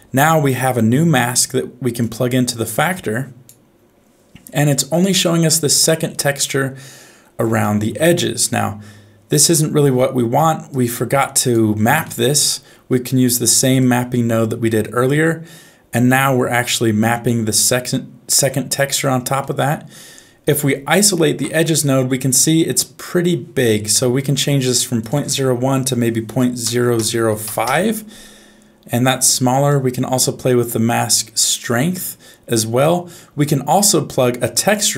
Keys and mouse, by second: 0.2 middle click, 2.0 click, 2.2-3.5 drag, 4.9-7.2 middle drag, 7.6 shift+middle click, 8.4-9.7 middle drag, 10.7 click, 12.1 middle click, 13.8-16.0 drag, 17.8 middle click, 19.4 middle click, 21.0 ctrl+shift+click, 22.4 middle click, 25.1-27.6 drag, 26.9 KP_0, 29.8-32.0 drag, 33.3 middle click.